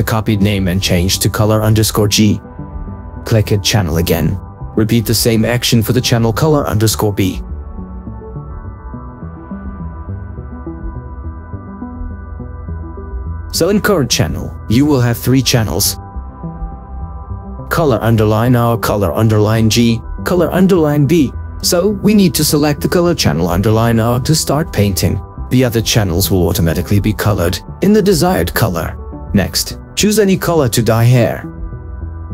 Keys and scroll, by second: 0.9 BackSpace, 2.5 shift+g, 8.8 ctrl+v, 10.3 BackSpace, 10.7 shift+b.